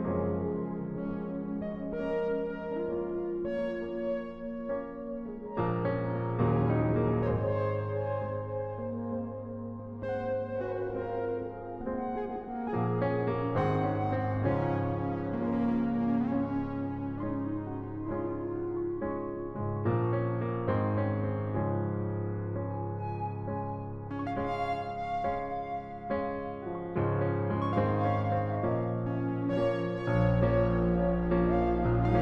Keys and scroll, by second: 8.1 ctrl+t, 15.5 Return, 20.1 ctrl+t, 22.2 Return.